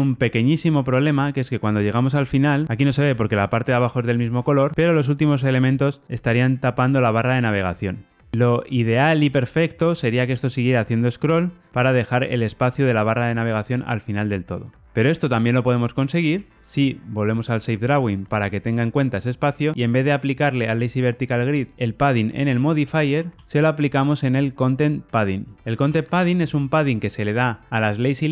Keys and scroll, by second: 15.9 super+z, 16.5 super+z, 27.8 Return.